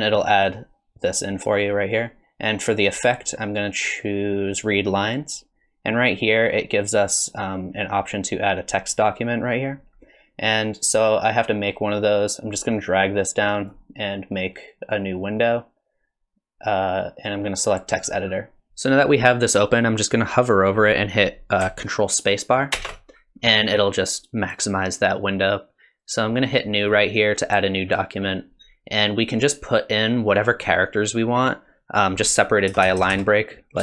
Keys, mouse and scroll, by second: 2.9 click, 12.4 click, 14.4 click.